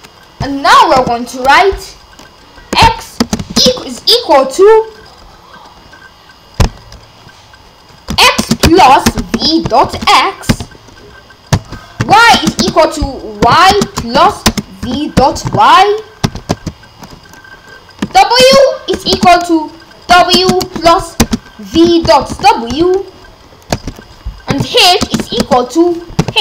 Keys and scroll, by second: 1.0 Return, 2.7 x, 3.2 space, 3.4 =, 3.6 space, 8.1-10.5 typing, 11.5 Return, 12.0-16.2 typing, 16.5 Return, 18.0 w, 18.4 space, 18.9 =, 19.1 space, 20.1-23.2 typing, 23.7 Return, 24.5-26.4 typing.